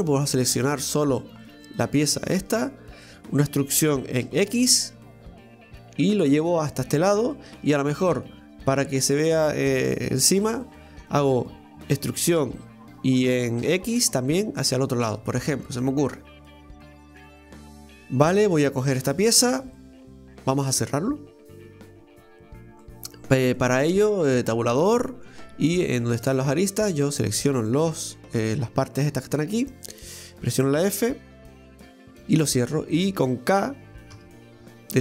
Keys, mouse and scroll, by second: 0.0 right click, 0.4 right click, 0.7 right click, 0.9 right click, 1.2 right click, 1.4 right click, 1.6 right click, 2.5 Tab, 3.0 middle click, 3.1 ctrl+z, 7.4-9.3 middle drag, 9.3 right click, 10.1 ctrl+shift+right click, 10.6-11.9 middle drag, 11.9 e, 15.8 middle click, 16.5 scroll down 1, 16.8-19.2 middle drag, 19.2 Tab, 19.8 middle click, 20.6 Tab, 22.8-24.3 middle drag, 24.3 Tab, 24.6-26.2 middle drag, 26.2 click, 27.1 right click, 27.6 shift+right click, 28.4 shift+right click, 29.4 shift+right click, 30.1 shift+right click, 31.4 f, 31.9-34.1 middle drag, 34.1 k.